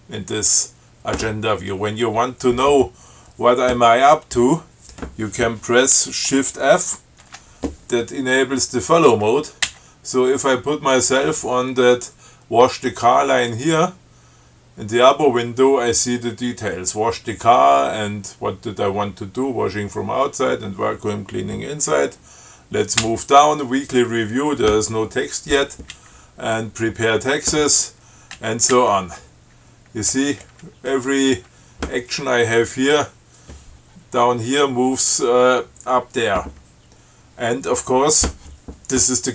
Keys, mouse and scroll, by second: 7.5 shift+f, 9.9 Down, 23.2 Down, 26.1 Down, 28.6 Down, 30.3 Up, 32.6 Down.